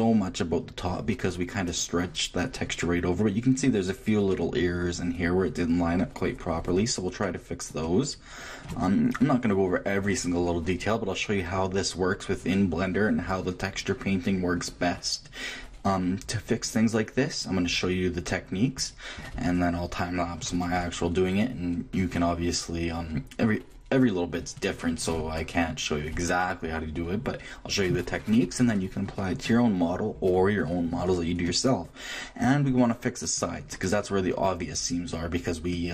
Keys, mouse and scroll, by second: 29.8-33.2 middle drag, 33.7-35.9 middle drag.